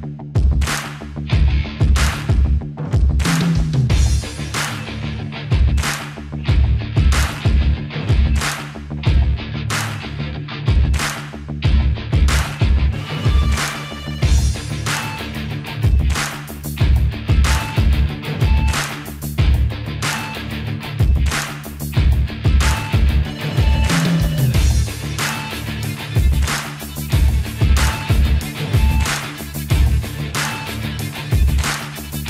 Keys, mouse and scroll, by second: 13.1 click, 24.8 click, 27.6 typing, 30.5 click.